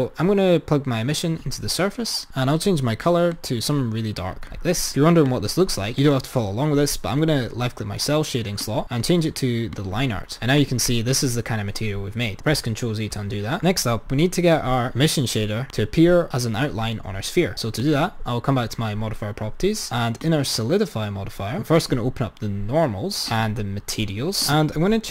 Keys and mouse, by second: 2.3 click, 5.3 click, 8.7 click, 10.7-11.1 drag, 13.4 ctrl+z, 13.5 ctrl+z, 15.7 click, 17.8 click, 20.3-21.7 drag, 21.9-25.1 drag.